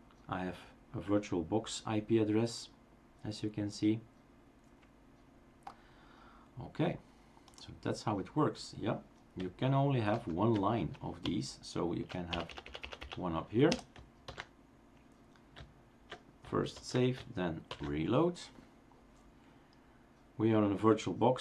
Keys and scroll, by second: 10.1 #, 11.3 Up, 11.9 Up, 12.1 Up, 12.4 Up, 12.6 Up, 12.8 Up, 13.0 Up, 13.7 BackSpace, 14.2 ctrl+s, 16.7 ctrl+s, 17.7 shift+super+r, 18.4 ctrl+shift+super+r.